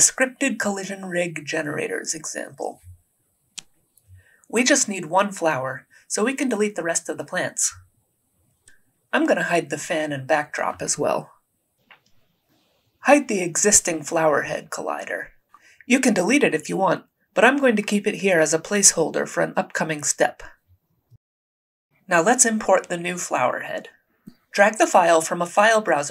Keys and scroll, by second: 7.3 Delete, 23.2 alt+Tab.